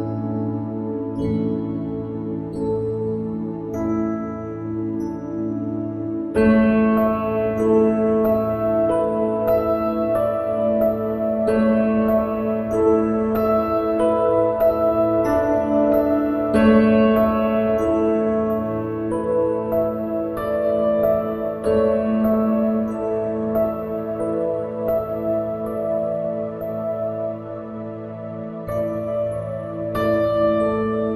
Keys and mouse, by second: 22.0 click, 22.6 right click, 23.4 click.